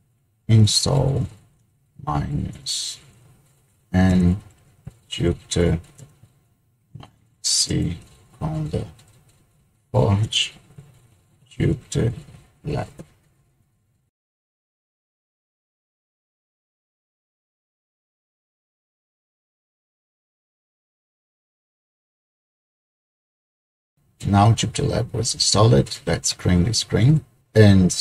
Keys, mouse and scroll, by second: 0.5-13.0 typing, 14.5 Return, 27.1 ctrl+l.